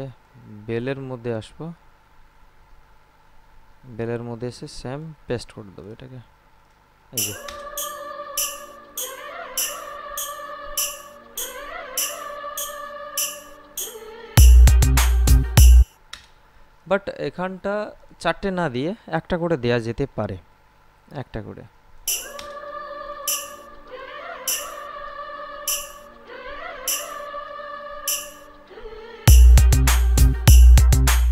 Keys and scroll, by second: 7.3 space, 15.9 space, 22.2 space.